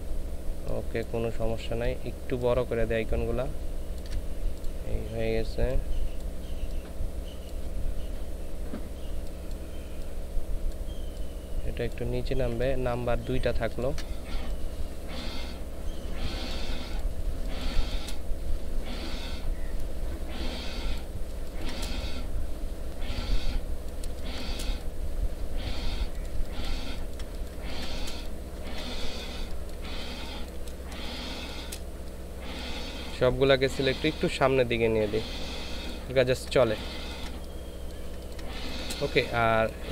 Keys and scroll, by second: 17.4 ctrl+space, 21.4 ctrl+space, 24.1 ctrl+space, 28.5-30.9 typing, 33.5 Left, 34.1 Left, 34.2 Left, 34.5 Left, 36.2 ctrl+space.